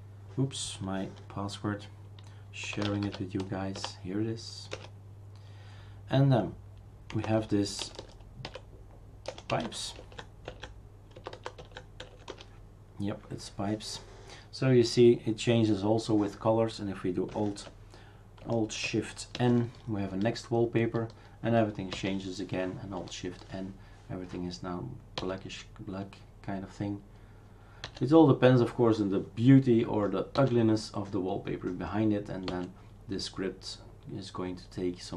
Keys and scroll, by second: 2.4-3.6 typing, 3.8 Return, 4.7 Return, 6.9-10.1 typing, 10.5 Tab, 11.2 typing, 11.6 Tab, 12.0 Tab, 12.3 Return, 19.4 alt+shift+n, 22.0 alt+shift+n, 25.3 alt+shift+n, 27.9 alt+shift+n, 30.4 alt+shift+n, 32.5 alt+shift+n.